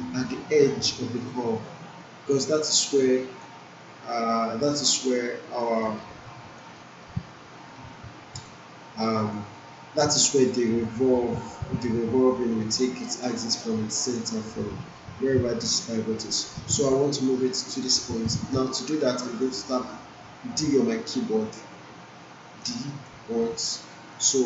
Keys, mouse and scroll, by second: 2.0-3.4 alt+right drag, 4.1 alt+middle click, 4.2 alt+middle click, 5.1-5.8 alt+right click, 5.8 alt+middle click, 6.2-7.1 alt+right click, 6.7 alt+middle click, 7.7-8.7 alt+right drag, 10.1 alt+middle click, 12.7-13.4 alt+right click, 13.4 alt+middle click, 13.9 alt+right click, 20.6 typing, 22.6 typing, 23.4-24.1 alt+right click, 24.1 alt+middle click.